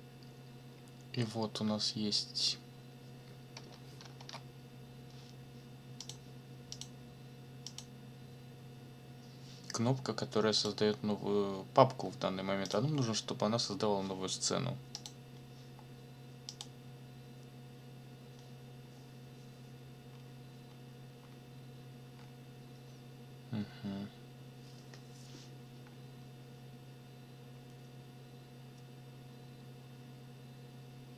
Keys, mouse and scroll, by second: 4.2 ctrl+o, 6.0 click, 6.7 click, 7.7 click, 10.6 click, 12.6 click, 14.9 click, 16.5 click, 20.1 scroll up 2, 22.1 scroll down 2.